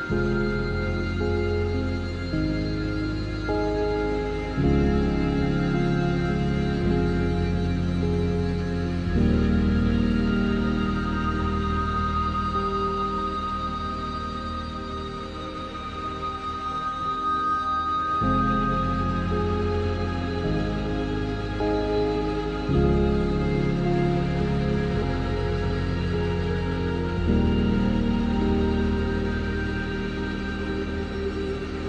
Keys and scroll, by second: 18.0 ctrl+z.